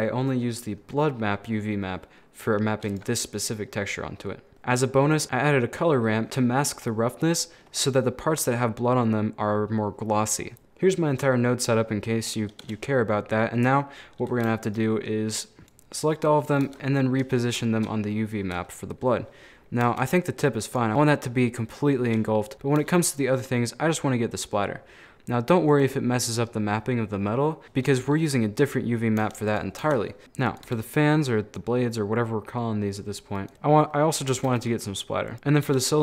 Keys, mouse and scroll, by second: 2.0 middle click, 2.6 scroll down 1, 2.9 right click, 3.5 middle click, 4.1-4.5 scroll down 2, 4.5 middle click, 4.6 click, 5.2-6.3 middle drag, 6.3 click, 6.8 middle click, 7.2-8.1 scroll up 5, 7.5 middle click, 8.1-12.2 middle drag, 13.6 middle click, 14.1 scroll down 3, 14.7 shift+right click, 15.4 shift+right click, 15.6 click, 16.2 scroll down 4, 16.4-16.7 scroll up 4, 16.7 Tab, 17.3 scroll up 1, 17.6-19.9 shift+middle drag, 19.9 Tab, 20.7 right click, 20.9 Tab, 22.1 scroll up 1, 22.5 ctrl+z, 22.8 g, 27.6-29.2 shift+middle drag, 29.2 Tab, 29.5 right click, 29.9 Tab, 30.2 r, 30.7 g, 33.5 scroll up 2, 33.9 middle click, 34.3 a, 34.5 a, 34.6 middle click, 35.3 right click, 35.3 Tab, 35.7 g.